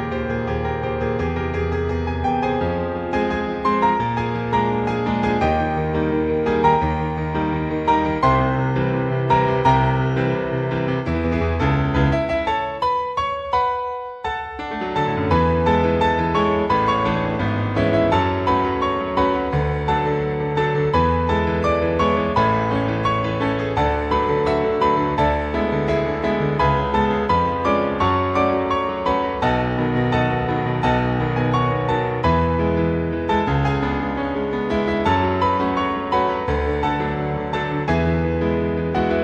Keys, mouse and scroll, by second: 6.9 click, 9.2 click, 10.2 click, 11.0 click, 11.9 click, 13.5-14.4 scroll down 1, 14.4 click, 16.3 click, 19.1-19.4 scroll down 1, 19.4 click, 20.0-20.7 scroll down 2, 20.7 click, 25.5-26.1 scroll down 1, 26.1-27.4 scroll down 1, 27.4 click, 33.2-34.6 scroll down 2, 35.0-35.3 scroll down 1, 35.3-35.7 scroll up 1, 35.9 click, 37.8 Tab, 39.1-39.2 scroll down 4.